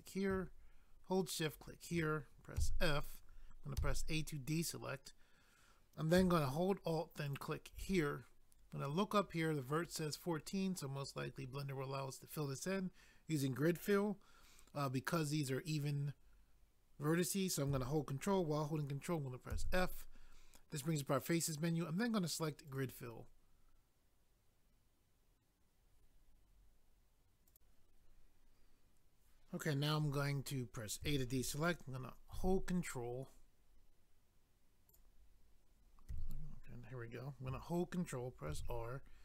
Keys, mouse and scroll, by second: 0.0 click, 0.1 click, 1.4 shift+click, 1.6 shift+click, 2.6 f, 3.9 a, 7.3 alt+click, 7.3 alt+click, 19.5 ctrl+f, 22.7 click, 22.8 click, 27.5 click, 27.6 click, 32.3 ctrl+r, 34.9 click, 36.1 click, 38.5 ctrl+r.